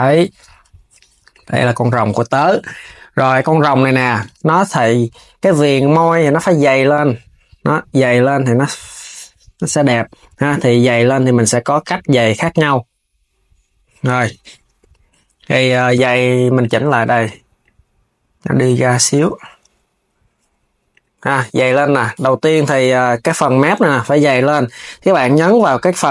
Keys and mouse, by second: 0.3 s, 0.9 click, 3.0 click, 5.9-8.9 drag, 9.2 z, 12.1-13.8 drag, 15.2 click, 15.4 Tab, 16.2 click, 17.2 click, 18.8 KP_3, 20.5 click, 21.0 KP_3, 21.6 s, 23.0 click.